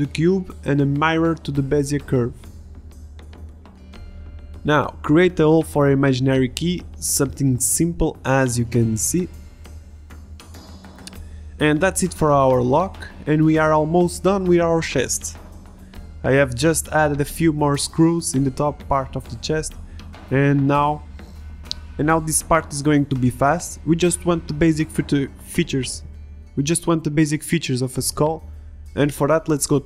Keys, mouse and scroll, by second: 1.3 Tab, 1.4 s, 3.2 middle click, 4.1-5.7 drag, 5.7 middle drag, 6.5 Tab, 6.6 Tab, 6.8 ctrl+r, 7.4 ctrl+r, 7.7 ctrl+r, 8.7 ctrl+Tab, 8.9 ctrl+Tab, 9.1 click, 9.2 Delete, 9.5 Delete, 9.9 f, 10.4 f, 10.7 f, 10.7 a, 10.9 Tab, 12.1 Tab, 13.0 middle click, 13.3 right click, 13.5 Tab, 13.9-20.2 typing, 16.6 drag, 17.0-17.4 drag, 17.9 click, 19.2 Tab, 19.6 click, 20.0 click, 20.4 click, 20.5 Tab, 21.1 middle click, 21.4 shift+d, 22.1 middle click, 22.2 middle click, 22.9 Tab, 22.9 a, 22.9 b, 23.1 Delete, 23.2 Tab, 23.5 ctrl+z, 23.5 ctrl+z, 24.2 middle click, 24.4 Tab, 24.4 a, 24.6 middle click, 24.8 middle click, 25.3 Tab, 25.7 g, 26.6 Tab, 26.7-28.4 typing, 27.1 Tab, 27.2 Tab, 28.0 Delete, 28.2 Tab, 28.6 middle click, 28.8 middle drag, 29.2 ctrl+s.